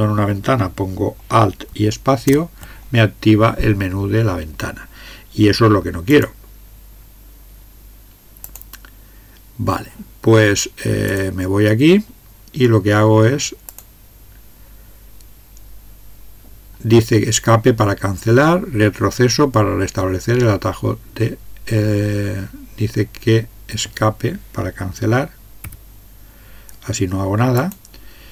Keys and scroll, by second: 2.4 alt+space, 25.6 Escape.